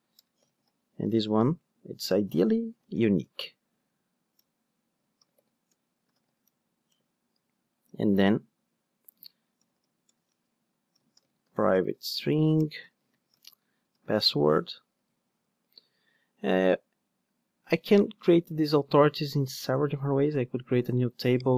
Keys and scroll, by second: 3.3 Return, 9.0 Tab.